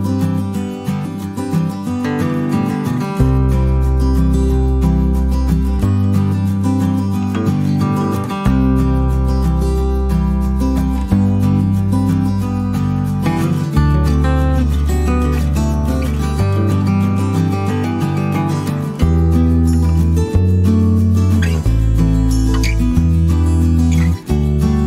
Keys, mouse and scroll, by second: 3.3 click, 6.5 click, 7.2 click, 8.3 click, 9.0 click, 9.3 click, 9.7 click, 12.2 click, 13.7-16.3 drag, 16.6 click, 17.4 click, 18.5 -, 19.1 click, 19.6 middle click, 23.2 click.